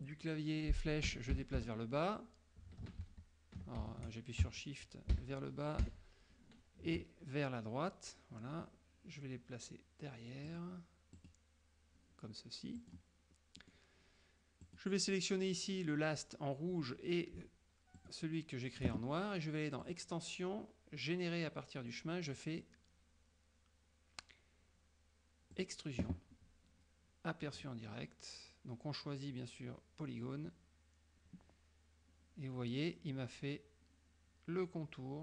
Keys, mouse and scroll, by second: 1.1 Down, 3.1 ctrl+z, 5.3 shift+Down, 5.9 shift+Right, 10.5 click, 11.2 click, 12.9 click, 13.6 middle click, 14.7 click, 18.1 shift+click, 19.9 click, 25.6 click, 27.6 click.